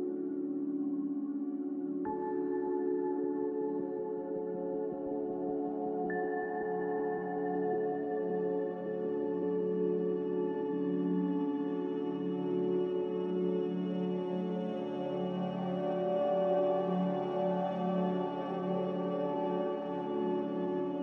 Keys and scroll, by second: 2.1 g, 5.5 Escape, 11.2 a, 17.6 z.